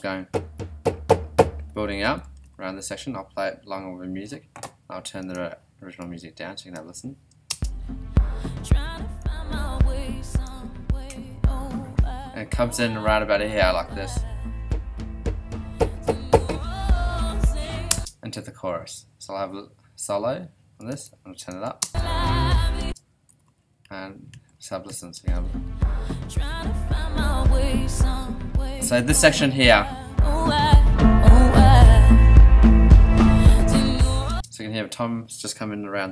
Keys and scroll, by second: 2.0 ,, 7.5 space, 17.9 space, 21.8 alt+space, 22.7 space, 23.3 ,, 25.1 space, 34.3 space.